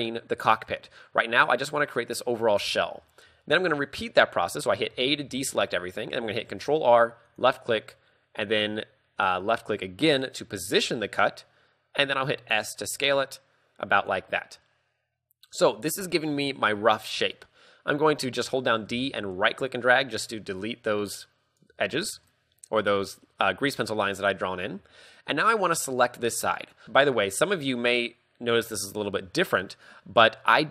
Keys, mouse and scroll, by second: 3.1 a, 5.0 a, 5.3 z, 5.5 a, 6.5 ctrl+r, 10.3 click, 12.2 s, 14.2 click, 14.3 scroll down 4, 14.7 middle click, 15.7 middle click, 16.1 KP_3, 16.3-17.3 scroll up 4, 19.0-21.7 typing, 19.4 right click, 20.7 right click, 21.3 right click, 22.2 shift+middle click, 22.7-24.3 scroll down 1, 26.9 KP_3, 26.9 z, 26.9 b, 27.5 scroll up 1, 28.9 a, 29.3 a, 29.8 middle click, 30.3-30.7 scroll up 1.